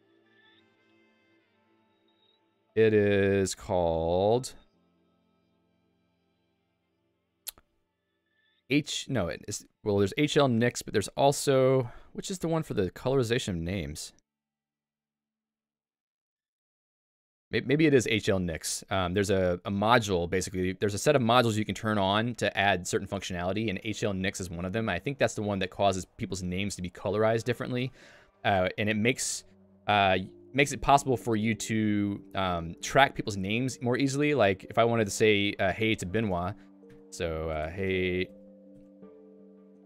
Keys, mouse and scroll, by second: 0.3 j, 1.1 Tab, 2.9 j, 6.8 ctrl+d, 10.2 click, 13.3 k, 17.8 j, 28.1 Return, 32.1 j, 34.7 click, 36.5 Escape, 36.9 i, 37.6 shift+h.